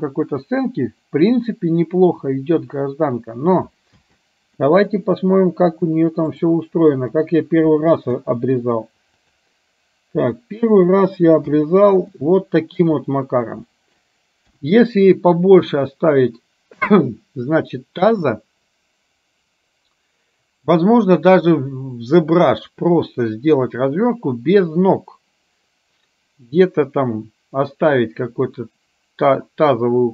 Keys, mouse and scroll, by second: 4.1 space, 4.7-6.5 middle drag, 7.2 click, 8.2 h, 10.2 click, 11.5 h, 12.2-13.0 middle drag, 13.7 middle click, 15.0 KP_1.